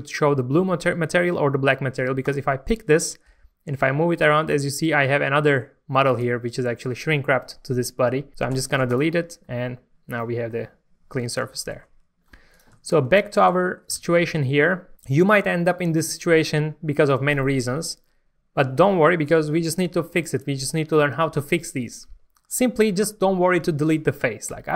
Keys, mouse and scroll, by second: 2.2 click, 2.9 middle click, 3.3 g, 6.1 right click, 8.5 x, 8.9 click, 9.5-11.2 middle drag, 12.1 scroll up 1, 12.5 click, 12.7 Tab, 13.2 shift+middle click, 14.0 alt+a, 14.6 shift+middle click, 20.0 scroll up 1, 24.5 3.